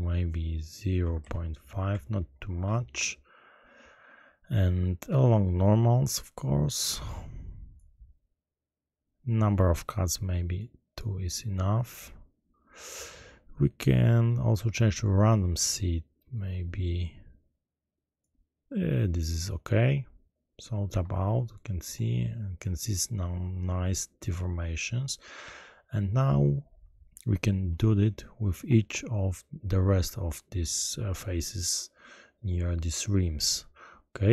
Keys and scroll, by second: 1.2 ., 1.9 5, 2.1 Return, 20.9 Tab.